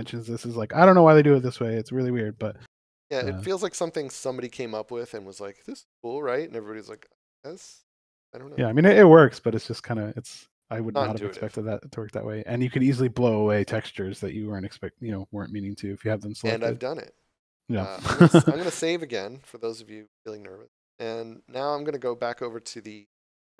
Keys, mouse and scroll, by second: 18.3 ctrl+s, 21.9 click.